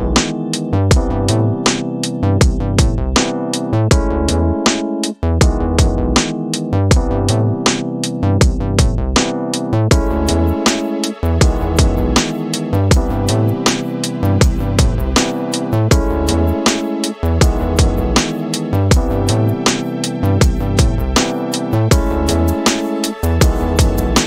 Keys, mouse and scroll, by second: 2.9 click, 5.1-7.8 drag, 9.5-14.6 drag, 19.1 a, 20.9 scroll up 1, 20.9 scroll down 1, 21.5 middle click, 22.1-24.1 scroll up 15, 23.1 middle click.